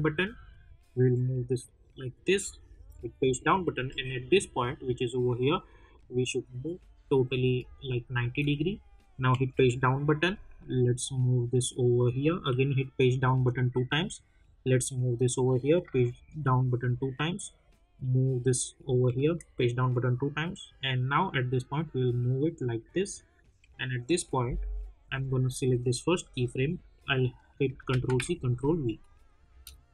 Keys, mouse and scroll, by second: 0.3-2.9 drag, 2.9 Page_Down, 5.8-7.6 drag, 7.6 space, 7.8 click, 8.1 space, 9.3 Page_Down, 10.5-13.1 drag, 13.1 Page_Down, 13.9-15.8 drag, 15.8 Page_Down, 16.9-19.0 drag, 19.0 Page_Down, 20.1-23.5 drag, 23.5 Page_Down, 25.7 click, 27.5 click, 27.8 ctrl+c, 28.1 ctrl+v, 29.0 click, 29.5 space.